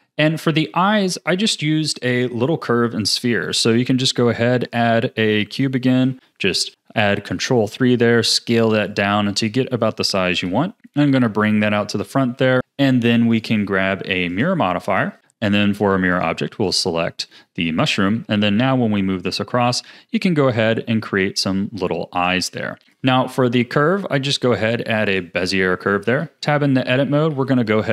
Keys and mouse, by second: 3.5 shift+a, 5.9 ctrl+3, 7.3 s, 9.1 z, 10.3 KP_3, 10.8 g, 12.3 r, 12.6 z, 12.6 KP_1, 13.3 drag, 14.3 click, 15.2 r, 16.1 click, 17.8 click, 18.1 g, 20.7 a, 20.9-21.7 drag, 22.8 KP_1, 22.8 shift+a, 26.2 Tab, 27.0 a, 27.3 a, 27.6 x.